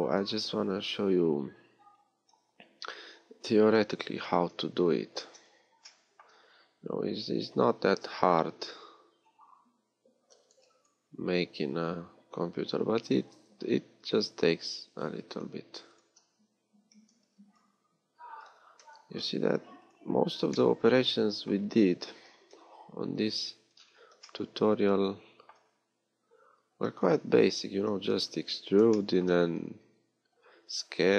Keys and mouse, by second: 0.1 z, 0.3 KP_3, 2.7 g, 9.1 Tab, 10.2 a, 10.5 b, 13.1 g, 16.8 a, 18.5 g, 22.5 KP_1, 23.1 z, 25.7 middle click, 25.9 a, 27.0 z, 29.5 z.